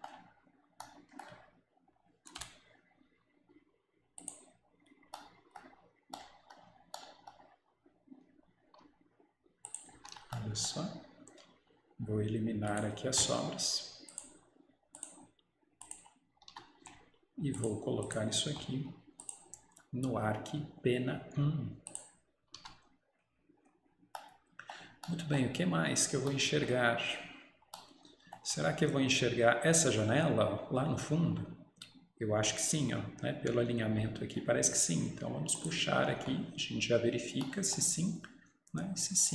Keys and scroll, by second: 2.4 Return, 4.1 Return, 10.0 Escape, 16.4 Escape, 16.6 Escape, 22.5 Escape, 22.6 Escape.